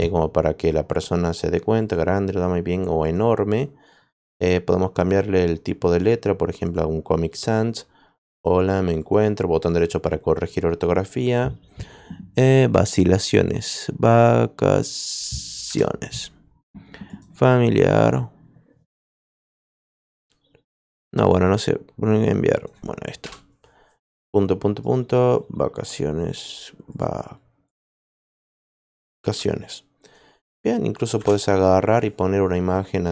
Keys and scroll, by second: 15.6 BackSpace, 23.2 BackSpace, 28.8-29.7 typing, 31.1 shift+Return.